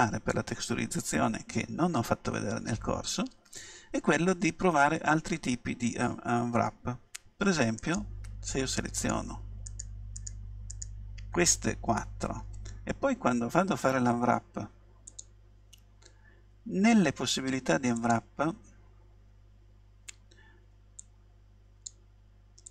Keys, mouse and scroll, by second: 0.5-3.9 middle drag, 4.5 a, 7.9-12.6 right drag, 15.1-19.9 drag, 21.0-22.7 drag.